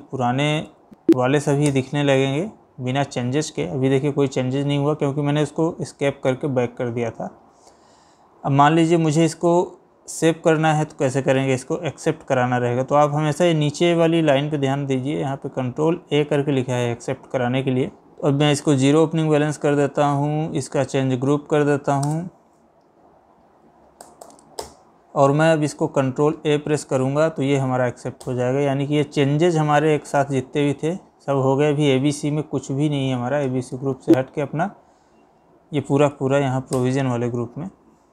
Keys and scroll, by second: 22.1 space, 22.4 Down, 24.1 Up, 26.0 ctrl+a, 33.5 Escape, 34.7 Down.